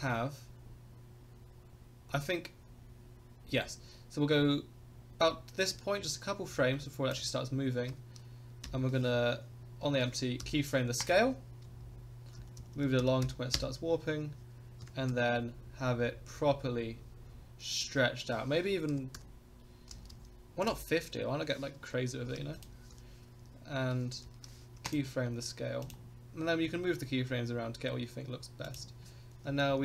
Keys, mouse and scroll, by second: 8.6 i, 10.4 i, 11.6 KP_0, 12.4 Right, 12.6 Right, 12.8 Right, 13.0 Right, 13.2 Right, 13.5 Right, 14.8 s, 22.9 i, 24.2 i, 25.8 click, 26.2-26.7 scroll up 5, 27.2 middle click, 28.6 click, 29.5 Right, 29.7 Right.